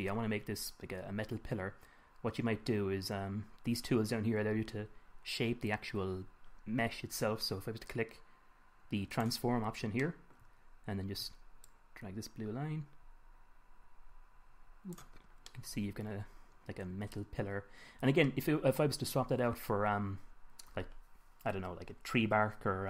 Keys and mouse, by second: 9.5-11.5 drag, 12.1-14.0 drag, 15.9-17.1 middle drag, 17.9-22.8 middle drag.